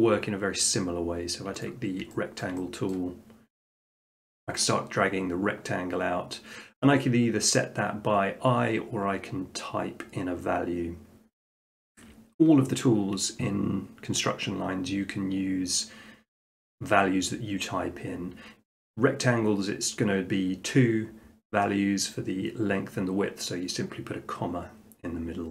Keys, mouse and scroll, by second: 1.6 click, 2.4 shift+middle click, 2.9 middle click, 3.7 click.